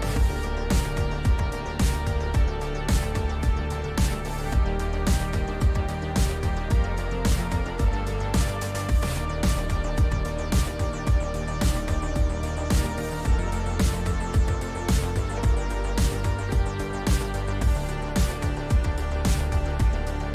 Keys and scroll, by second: 5.2 space.